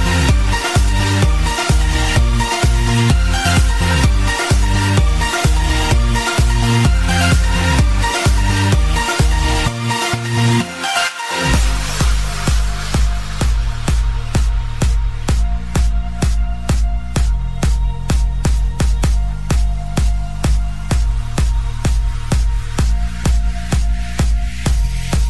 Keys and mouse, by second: 1.0 click, 1.4 space, 9.8 u, 11.1 click, 14.7 right click, 14.7 shift+click, 15.7 shift+click, 17.5 ctrl+z, 18.5 ctrl+z, 21.2 ctrl+z, 21.2 click, 22.1 ctrl+z, 24.4 click.